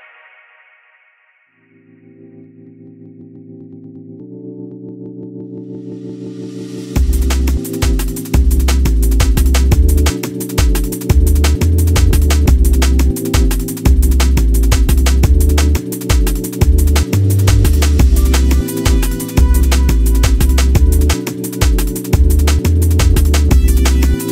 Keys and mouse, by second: 1.8 click, 2.7 Tab, 4.5 Tab, 5.2 3, 5.3 click, 5.9 alt+middle click, 6.3 shift+click, 7.3 click, 7.9 click, 8.7 Tab, 10.8 ctrl+Tab, 14.5 click, 15.3 click, 16.1 click, 16.9 click, 17.8 click, 20.5-24.3 drag.